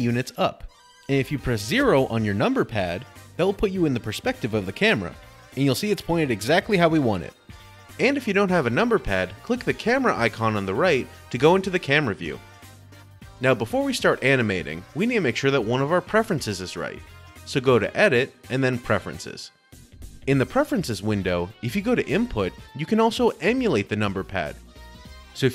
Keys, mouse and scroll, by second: 8.5 middle click, 8.5 0, 9.9 middle click, 11.3 click, 13.0 middle click, 14.3 click.